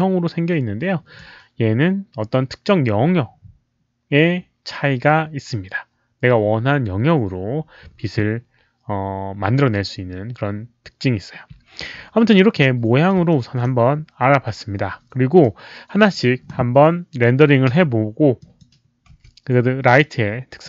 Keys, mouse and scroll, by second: 0.0 alt+middle click, 13.3 alt+middle click, 15.4 click, 17.7 Delete, 18.4 drag, 19.1 w, 20.0-20.6 drag.